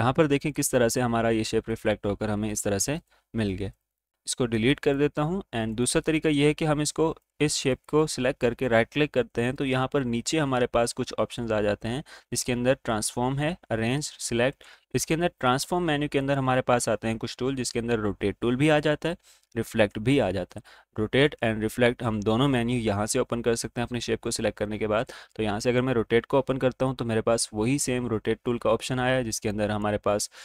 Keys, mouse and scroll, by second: 5.7 right click, 7.0 click, 7.6 right click, 25.4 click, 29.5 click.